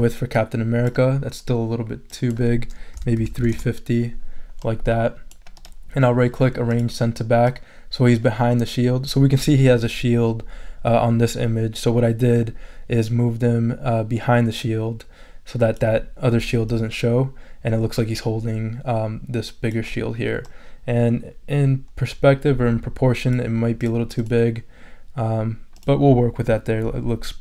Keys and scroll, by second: 2.7-3.8 typing.